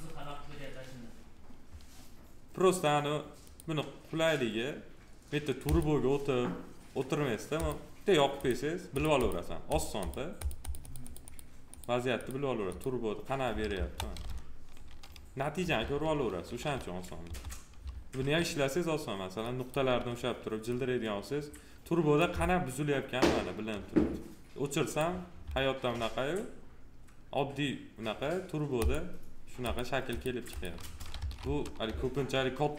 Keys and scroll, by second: 13.7 F4, 31.1 ctrl+z.